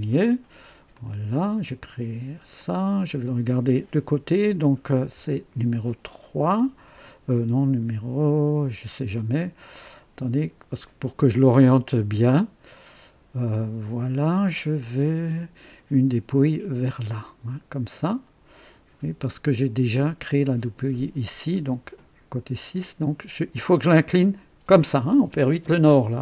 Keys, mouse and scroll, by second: 0.9 click, 2.6 click, 5.0 KP_3, 6.6-7.3 right drag, 7.5 2, 7.5 KP_2, 8.6 KP_1, 11.6 KP_3, 19.2-21.7 drag, 21.7 KP_6.